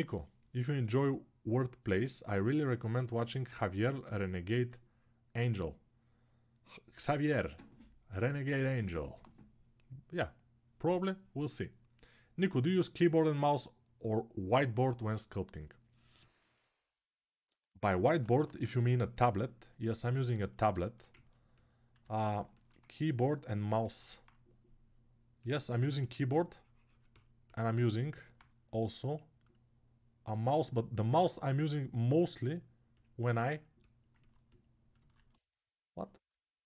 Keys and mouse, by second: 21.9 alt+q, 22.4-29.2 ctrl+alt+shift+drag, 30.5 middle click, 30.9-36.6 drag, 34.8 alt+q.